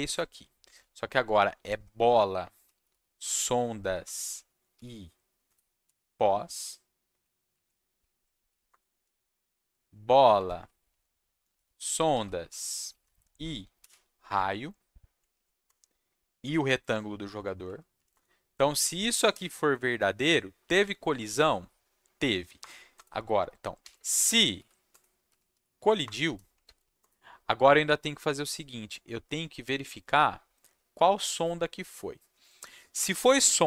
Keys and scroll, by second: 1.2 Right, 1.7 Right, 2.4-5.8 typing, 6.2 Left, 7.5 Left, 8.0 Right, 8.3 Left, 8.7 Return, 9.0 Right, 10.3 Right, 10.5 Right, 10.6 Right, 10.7 Right, 10.9 Right, 11.1-13.8 typing, 14.2 Left, 15.3 Left, 15.6 Return, 16.5 Left, 17.5 Left, 18.1 Return, 19.3 /, 22.6 Return, 22.9-26.8 typing, 26.0 Return, 27.0 Return.